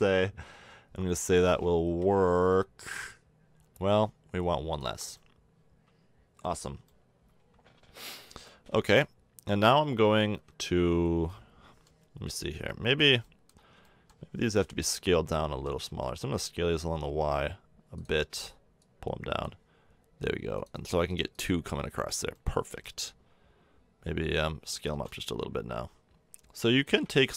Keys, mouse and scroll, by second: 1.8 KP_1, 5.0 click, 14.4 drag, 15.5-17.2 drag, 15.5 s, 18.8-22.3 drag, 22.3-24.3 middle drag, 24.7 s.